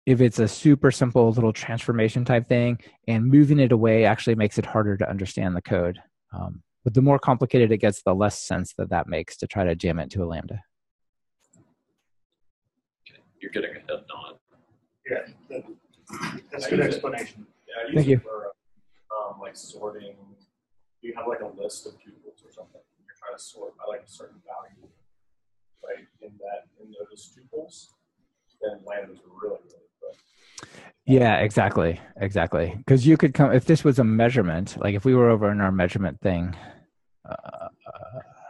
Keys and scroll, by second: 34.6 super+c, 34.9 ctrl+Tab.